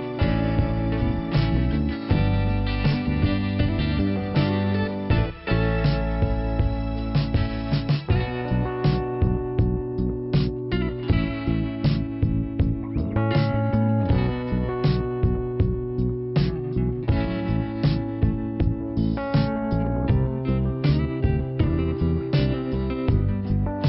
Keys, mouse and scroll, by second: 1.8 click, 3.1 click, 4.4 click, 5.3 click, 6.1 click, 6.9 click, 7.0 click, 7.3 click, 8.4 scroll down 1, 9.0 middle click, 11.7 click, 13.1 click, 13.7 click, 14.8 click, 17.7 click, 19.0 click, 19.8 scroll up 1, 20.9 click, 21.5 click.